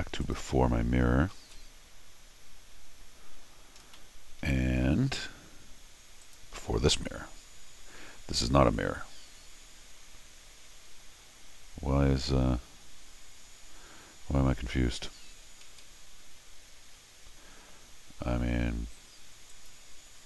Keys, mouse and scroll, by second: 0.2 click, 1.3 ctrl+alt+r, 3.8 scroll down 2, 3.9 middle click, 4.0 middle click, 6.2 click, 9.2 ctrl+alt+r, 15.6 ctrl+z, 17.3 scroll down 2, 19.5 click.